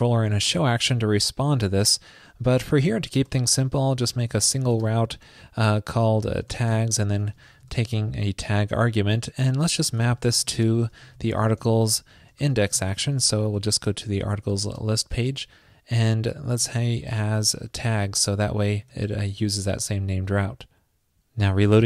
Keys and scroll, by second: 9.1 super+Right, 10.5 super+Right, 13.7 super+Right, 18.9 super+s.